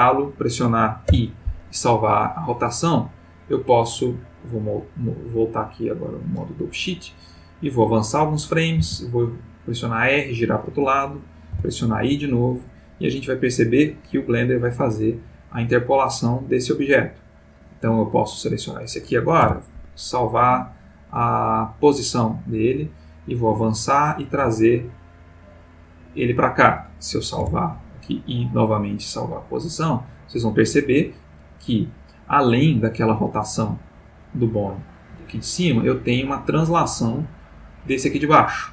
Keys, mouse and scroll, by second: 0.0 click, 1.1 i, 2.2 click, 4.6 click, 5.2 click, 7.1-8.2 drag, 8.8 r, 10.0 click, 11.5 i, 12.2 click, 13.0-16.9 drag, 17.3 click, 19.4 i, 21.6 click, 22.7-24.1 drag, 24.3 g, 25.5 click, 27.4 i, 28.5 click, 29.6-34.3 drag, 34.7 click, 35.9 click, 37.5-38.7 drag.